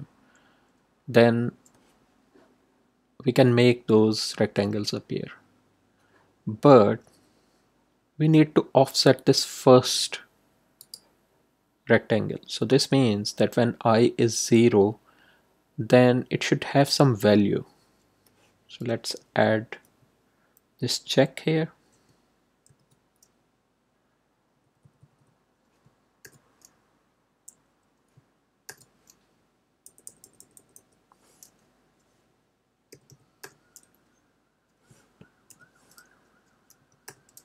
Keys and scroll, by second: 22.6 shift+9, 24.3 Right, 25.0 Right, 26.2 shift+0, 28.6 shift+0, 29.8 Left, 30.4 Left, 32.9 =, 33.4 0, 35.5 shift+/, 36.7 5, 37.0 0.